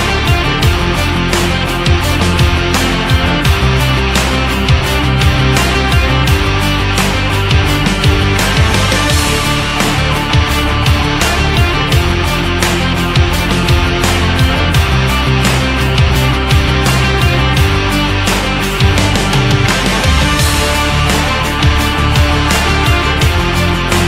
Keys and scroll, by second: 6.9 shift+Down, 8.4 Up, 19.1 Up, 23.8 ctrl+z.